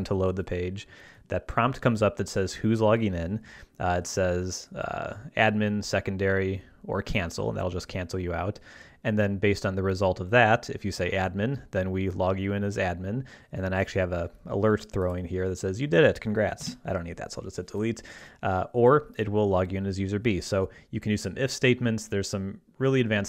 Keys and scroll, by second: 16.6 BackSpace.